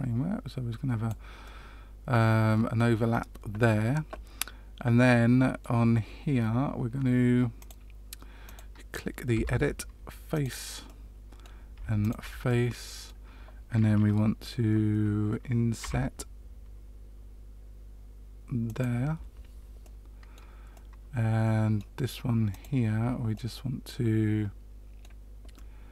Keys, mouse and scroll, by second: 1.4 middle click, 5.0 middle click, 7.5 click, 8.4 click, 9.3 Tab, 10.3 click, 10.8 middle click, 11.9 shift+click, 12.4 middle click, 15.8 i, 19.8 middle click, 20.7 middle click, 22.4 click, 23.3 middle click, 25.5 middle click.